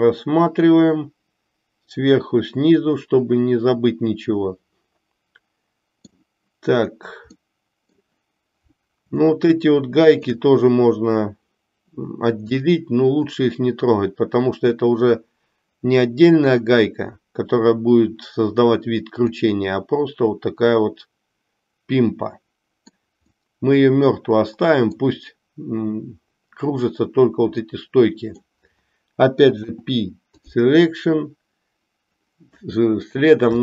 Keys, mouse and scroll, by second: 7.3 middle click, 9.2-10.4 shift+middle drag, 12.6 middle click, 19.3-23.1 middle drag, 23.6-25.2 middle drag, 27.6-28.6 middle drag, 29.7 p, 32.7 middle click.